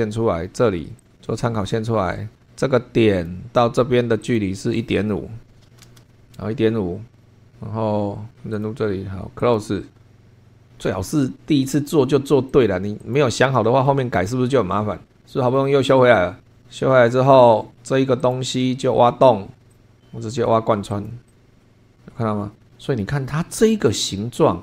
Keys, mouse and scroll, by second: 1.0 click, 1.1 scroll down 2, 2.0 Escape, 3.1 click, 4.2 click, 5.2-6.2 typing, 7.2-8.5 scroll up 2, 8.5 click, 9.4 click, 12.5 click, 13.0 click, 13.9-15.7 middle drag, 17.4 scroll down 1, 18.2 click, 19.7 click, 20.9 click, 21.3 click, 21.6-23.2 middle drag.